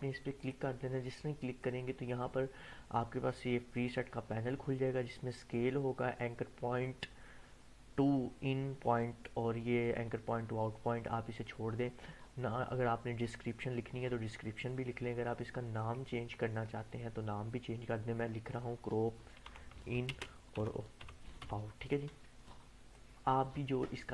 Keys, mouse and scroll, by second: 0.4-2.2 drag, 15.8-18.5 drag, 19.2-21.9 typing, 22.9-24.1 drag.